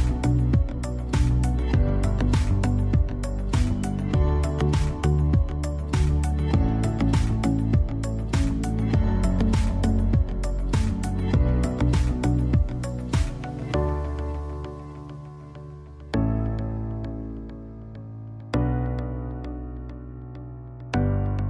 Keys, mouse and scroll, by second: 1.4 click, 4.7 ctrl+d, 6.1 click, 6.1 click, 13.3 click, 14.1 ctrl+space, 14.4 ctrl+click, 14.6 ctrl+space, 20.0-21.4 drag.